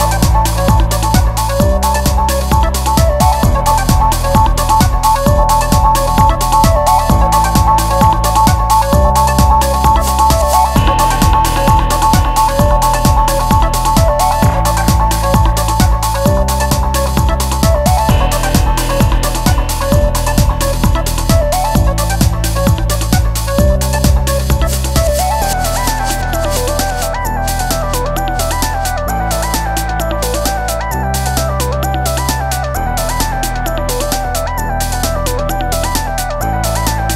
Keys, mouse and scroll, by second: 3.6 shift+a, 14.9 shift+a, 18.4-20.4 drag, 26.8 shift+a.